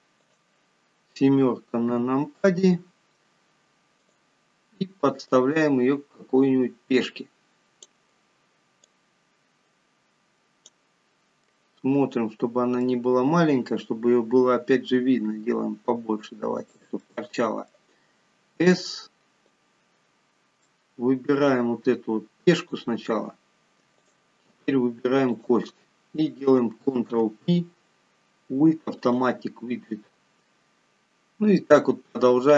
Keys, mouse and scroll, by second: 2.1 KP_7, 4.3 click, 5.6 click, 9.1 click, 11.8 middle click, 14.0 scroll up 3, 15.6 s, 17.3 middle click, 19.0 click, 20.3-20.9 scroll up 3, 20.9 shift+middle click, 22.0 scroll up 2, 22.9 click, 24.3 click, 25.6 shift+click, 27.3 ctrl+p.